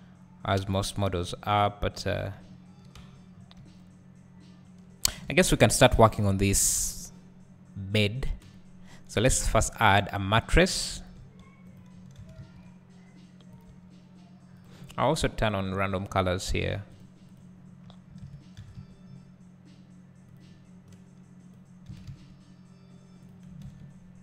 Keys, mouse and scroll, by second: 1.9 scroll down 1, 3.0 Tab, 3.3 scroll down 1, 3.6 `, 8.9 KP_1, 11.2 s, 12.2 s, 13.6 click, 13.7 g, 14.6 click, 17.8-20.3 drag, 17.8-18.6 scroll up 1, 18.6 s, 22.1-23.3 drag, 22.1 s.